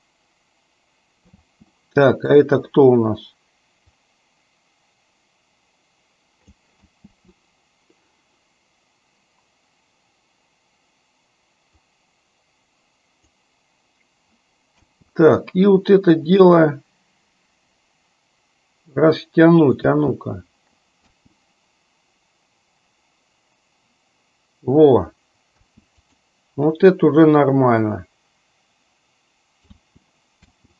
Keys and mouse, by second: 1.6 space, 4.0-6.8 drag, 7.1 space, 11.8-13.5 drag, 14.9 space, 16.5-19.9 drag, 19.9 space, 21.1 space, 25.7 space, 26.1 click, 28.1-29.8 drag, 29.8 space, 30.5 space.